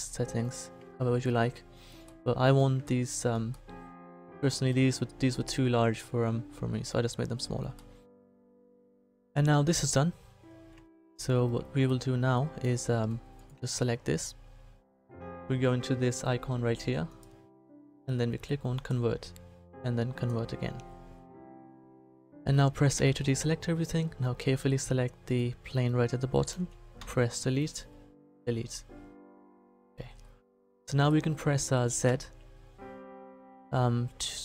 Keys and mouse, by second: 0.9-7.4 middle drag, 13.4-15.2 right drag, 22.9 a, 27.0 Delete, 28.8-31.3 middle drag, 32.0 z.